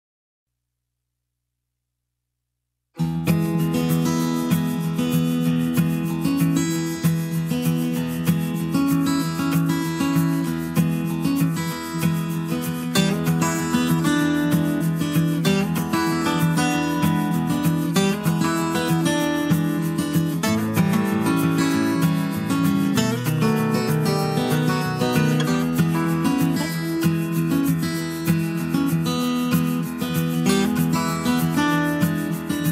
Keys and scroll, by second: 7.3 Escape, 11.6 Escape, 17.3 Escape, 28.1 Escape.